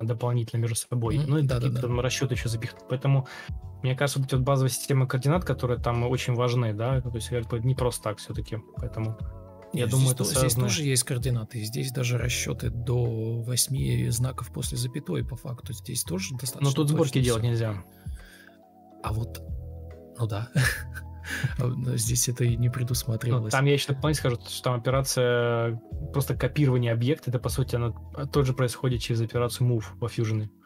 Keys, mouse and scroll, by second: 0.1 ctrl+c, 0.3 ctrl+z, 0.7 ctrl+z, 1.8 ctrl+z, 2.2 ctrl+v, 10.2 ctrl+x, 11.1 Delete, 11.4 ctrl+v, 11.7 ctrl+space, 11.8 ctrl+space, 19.6 alt+`, 19.8 Escape, 20.4 Delete, 20.6 Escape, 23.1 Delete, 24.7 Delete, 29.7 Escape.